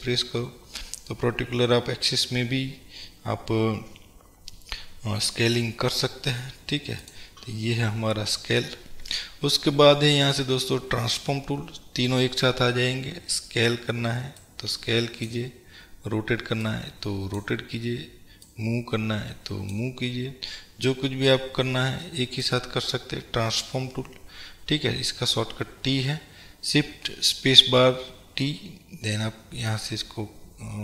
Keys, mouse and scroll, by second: 7.3 click, 11.1 click, 14.6-30.8 drag.